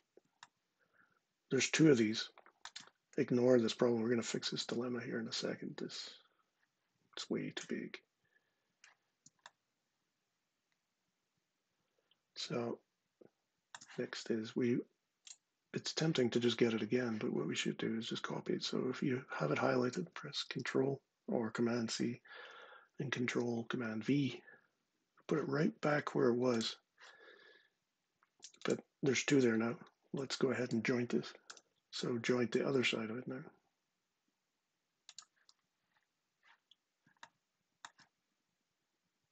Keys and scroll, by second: 20.2 super+c, 22.8 super+v, 31.2 j.